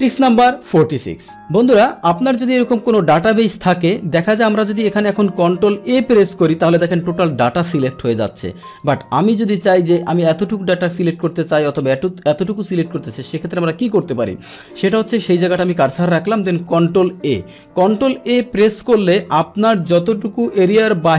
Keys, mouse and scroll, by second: 4.0-5.0 scroll down 2, 5.0 click, 6.0 ctrl+a, 8.1 click, 8.7 click, 10.0 click, 11.6 click, 12.8 click, 13.5 click, 15.3 click, 17.2 ctrl+a.